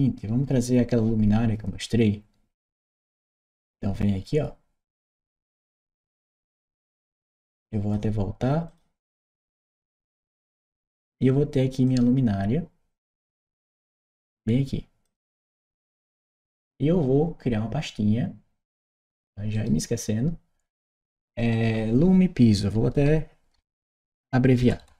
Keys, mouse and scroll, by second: 5.0-6.4 drag, 7.4 click, 8.5 click, 9.3-10.5 drag, 11.7-13.9 drag, 14.9 click, 15.1 click, 18.5 click, 19.3 right click, 21.3 click, 22.8 shift+l.